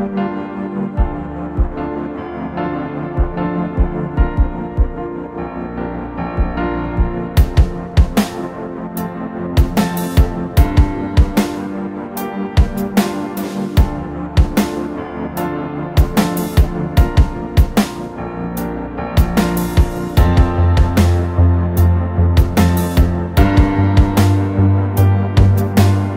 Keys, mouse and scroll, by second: 1.1 ctrl+t, 3.4 Return.